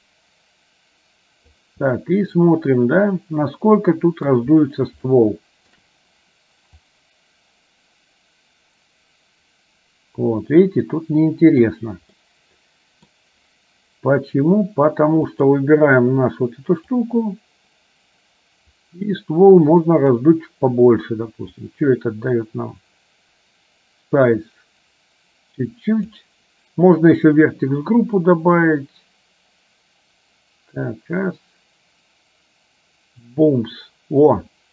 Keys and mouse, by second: 2.1-4.5 middle drag, 5.2 shift+middle click, 7.0-11.7 drag, 12.2-13.2 middle drag, 15.4 click, 17.0-20.2 drag, 21.9-26.2 drag, 28.7-34.7 drag.